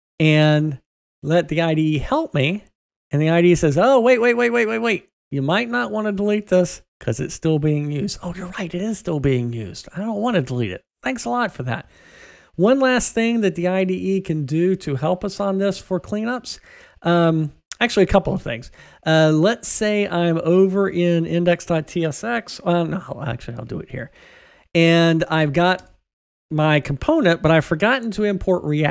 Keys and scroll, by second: 25.6 super+BackSpace.